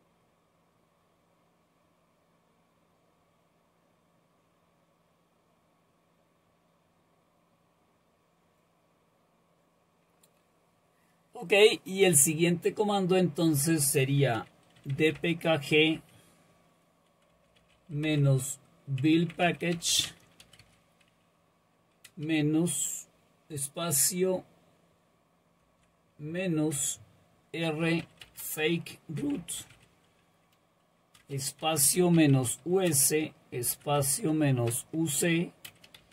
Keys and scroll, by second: 14.6-20.9 typing, 25.6 typing, 27.6-36.0 typing.